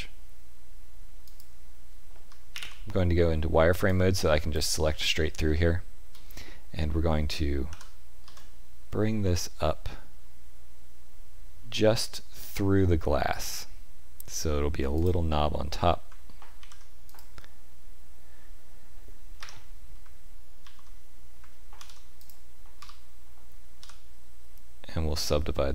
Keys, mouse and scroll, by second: 2.2 z, 3.8 click, 5.4 shift+middle click, 7.6 g, 16.5 ctrl+r, 20.6 ctrl+z, 21.7 ctrl+r.